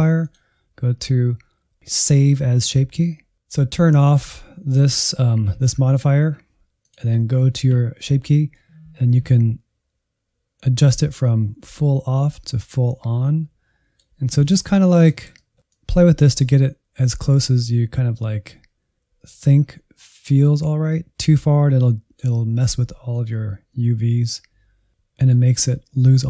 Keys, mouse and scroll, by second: 0.2-1.8 drag, 3.3 click, 4.0-14.3 drag, 14.3 scroll down 2, 14.5-16.7 middle drag, 16.7-19.1 drag, 22.7-25.9 drag, 25.9-26.2 middle drag.